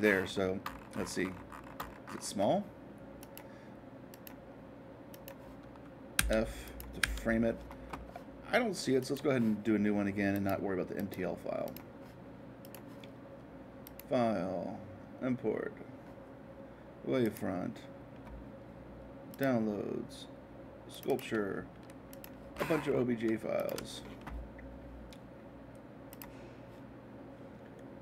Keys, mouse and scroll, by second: 0.0-2.6 middle drag, 3.2-5.2 drag, 6.1 f, 6.6 click, 7.0 f, 9.0-11.0 drag, 11.6-13.6 drag, 13.8-15.8 drag, 17.2-19.2 drag, 19.3-21.3 drag, 22.1 click, 22.7 middle click, 23.5-25.5 shift+drag, 26.1-28.0 drag.